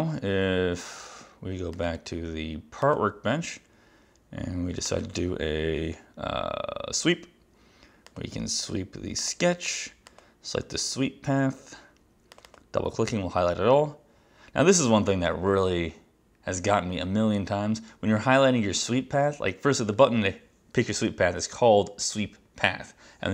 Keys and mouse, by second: 1.8 click, 4.9 click, 8.1 click, 9.2 click, 10.1 click, 12.4 click.